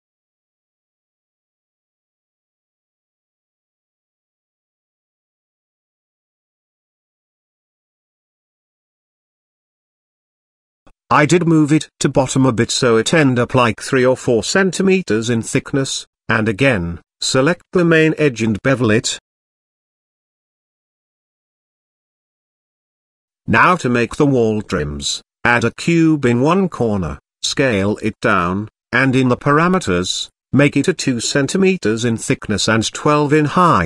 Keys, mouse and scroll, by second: 0.5 e, 4.6 g, 7.0-8.7 middle drag, 9.1 middle click, 10.8 g, 14.4 click, 15.1 click, 16.1 ctrl+b, 19.8 Tab, 20.3-21.0 middle drag, 23.3 click, 24.2 click, 24.5 shift+a, 26.6 s, 28.3 KP_Decimal, 29.4 middle click, 30.2 n, 31.4 click, 32.2-33.5 drag.